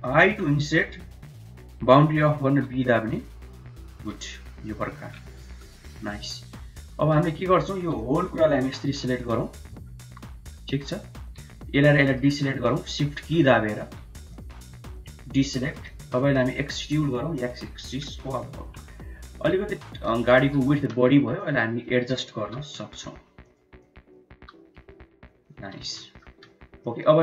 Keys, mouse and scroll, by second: 4.0 middle click, 4.5 middle click, 5.2 shift+middle click, 5.6 middle click, 6.2 middle click, 6.7 middle click, 7.6 1, 7.8 middle click, 8.6 click, 9.1 middle click, 9.9 3, 10.4 middle click, 11.8 shift+click, 13.0 middle click, 13.4 shift+middle click, 14.3 shift+click, 15.3 shift+middle click, 16.3 e, 18.3 KP_1, 20.2 shift+z, 20.5 shift+click, 20.9 1, 21.4 click, 22.3 g, 23.7 click, 24.2 g, 25.6 shift+z, 25.9 middle click, 26.2 Tab, 26.6-27.0 middle drag.